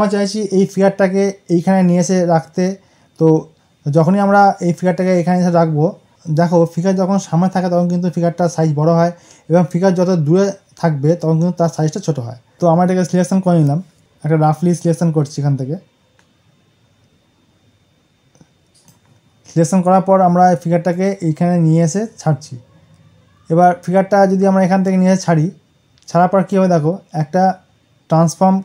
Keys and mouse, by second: 12.4-28.6 drag.